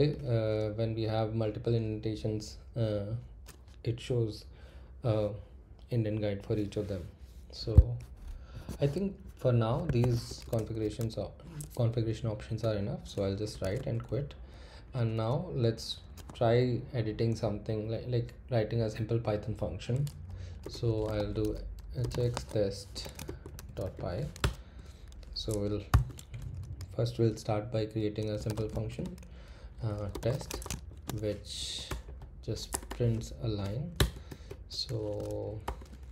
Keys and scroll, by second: 9.8 Escape, 10.3-10.7 typing, 12.6 Return, 13.0-14.1 typing, 20.4-24.4 typing, 25.9-27.1 typing, 28.1-33.4 typing, 31.6 Right, 33.9 Return, 34.5 shift+', 35.6-36.1 typing.